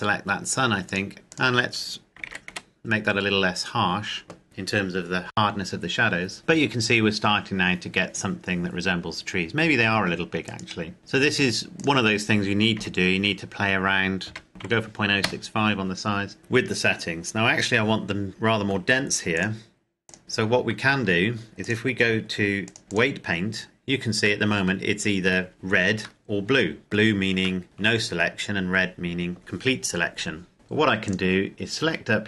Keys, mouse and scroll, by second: 1.1 click, 2.2 KP_Decimal, 2.2 KP_1, 2.4 KP_Enter, 4.4 click, 10.7 right click, 11.0 click, 12.7 KP_Decimal, 14.2 KP_0, 14.6 KP_5, 15.9 KP_Enter, 19.6 click, 20.9 Tab, 21.6 click, 22.7 click, 24.4 middle click, 25.5 KP_Decimal, 26.2 middle click, 27.6 shift+middle click, 28.2-28.5 scroll up 1, 31.0 click.